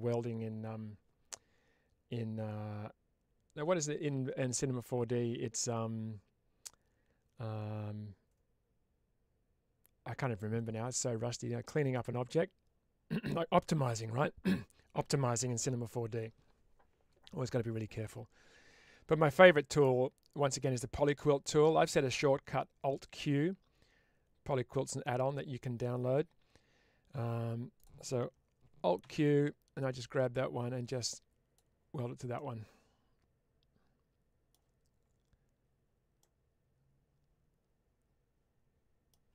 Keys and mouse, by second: 28.9 alt+q, 30.1 click, 32.2-34.4 middle drag, 36.1-39.0 middle drag.